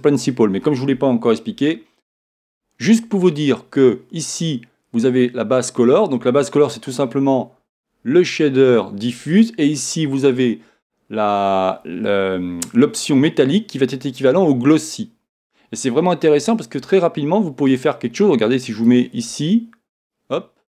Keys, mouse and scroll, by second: 18.8-20.6 drag.